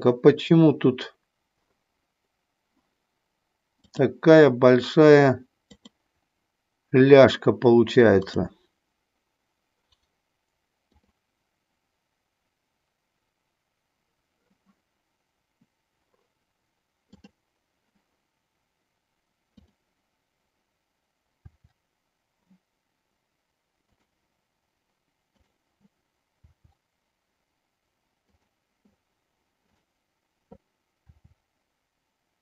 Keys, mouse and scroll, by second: 5.6 click, 10.9 click, 17.2 click, 19.5 click, 21.4 r, 25.3 click, 26.4 r, 28.3 click, 29.6 click, 31.1 r.